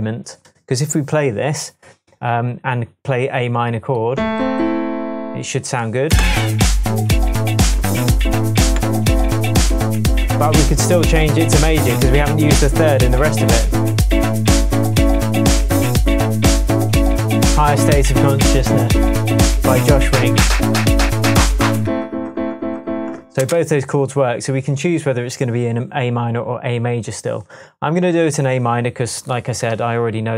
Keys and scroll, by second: 6.1 space, 23.3 space.